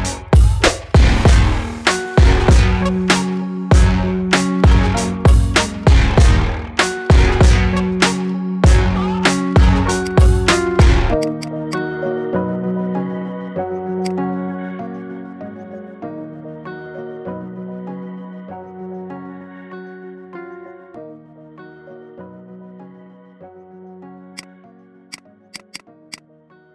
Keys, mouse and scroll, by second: 5.1-6.1 middle drag, 6.1-6.5 scroll up 2, 6.5-7.8 shift+middle drag, 7.8 Tab, 9.0 Tab, 9.9 click, 10.7 click, 11.0 alt+shift+click, 11.6 alt+shift+click, 12.5 ctrl+b, 14.1 middle click, 14.5-14.9 scroll up 4, 14.9-16.3 middle drag, 16.3 ctrl+z, 16.7-17.9 ctrl+z, 18.1 ctrl+z, 20.1 f, 25.0 click, 25.3 alt+shift+click, 25.5 alt+shift+click, 25.9 alt+shift+click, 26.5 f.